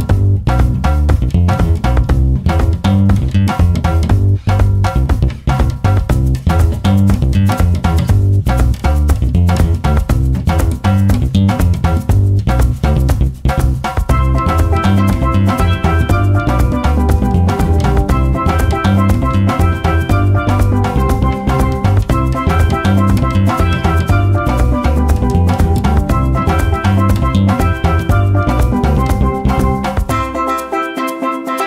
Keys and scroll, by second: 11.4 g, 16.8 ctrl+z, 21.0 ctrl+z, 22.0 v, 25.8 g.